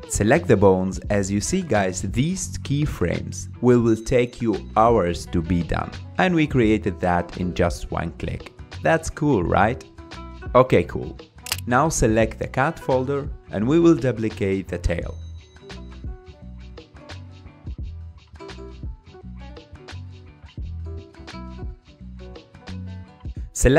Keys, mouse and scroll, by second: 1.7-2.1 scroll down 5, 2.6-3.1 scroll down 9, 6.0-7.1 scroll up 11, 7.7-8.1 scroll up 4, 8.2 click, 9.2 click, 9.8 scroll down 3, 10.3 click, 11.2-14.4 middle drag, 14.4 click, 16.7 click, 17.8-18.8 drag, 22.6 click, 23.6 click.